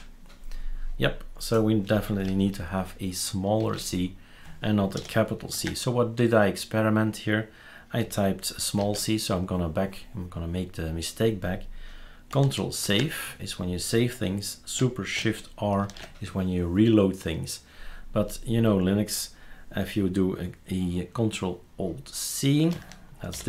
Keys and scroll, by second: 5.0 shift+super+c, 8.8 c, 12.8 ctrl+s, 15.8 super+s, 23.3 ctrl+alt+e.